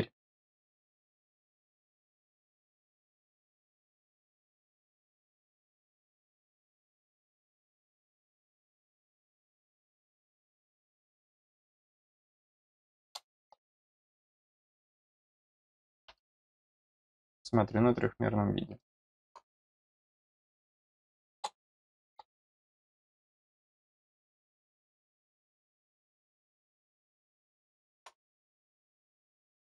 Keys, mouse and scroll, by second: 2.8 click, 4.5 click, 15.1 click, 17.0 click, 17.2 click, 18.2 scroll down 1, 18.7 middle click, 19.9 click, 22.5 click, 23.9-28.0 middle drag, 28.7 click.